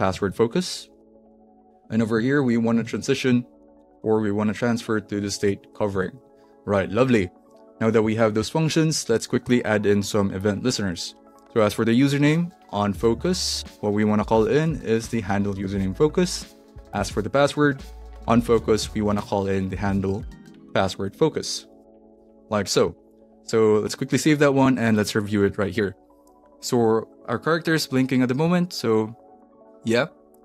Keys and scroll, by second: 0.0-1.5 typing, 1.9 alt+Right, 2.9 alt+shift+Right, 3.3-5.8 typing, 6.0 super+s, 9.4 Return, 12.2-15.1 typing, 13.5 Return, 15.6 Return, 16.0 super+s, 17.8 Return, 18.0-20.8 typing, 21.0 Down, 21.6 Up, 21.8 Return, 22.3 super+s.